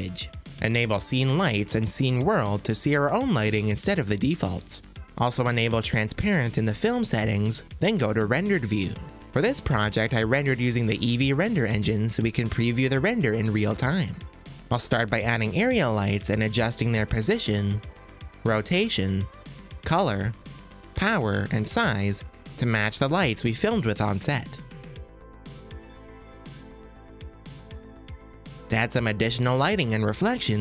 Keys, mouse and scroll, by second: 1.6-5.1 drag, 5.8 click, 8.0 click, 9.0 z, 13.1-13.6 middle drag, 14.5 shift+a, 17.4 g, 18.3-18.7 drag, 18.7 r, 20.3 click, 22.0 click, 22.6 g, 22.9-23.2 middle drag, 23.4 r, 23.6-24.5 middle drag, 24.6 r, 25.0 g, 25.2 middle click, 25.4 KP_0, 26.4 click, 26.9 click.